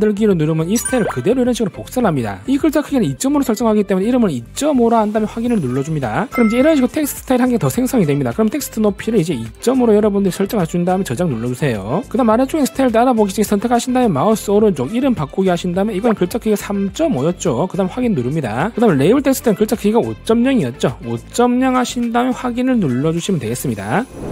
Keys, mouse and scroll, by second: 0.9 click, 4.6 2, 5.1 5, 9.1 click, 9.7 click, 10.9 click, 11.9 click, 14.3 right click, 15.5 click, 16.9 3, 17.5 5, 18.7 click, 19.6 click, 21.1 5, 23.4 click.